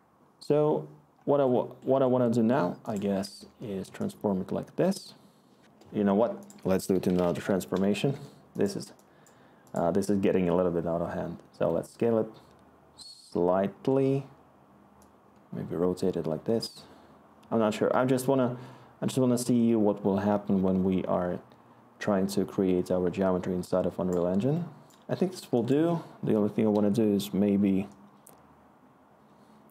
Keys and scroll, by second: 6.6-7.8 typing, 7.9 Return.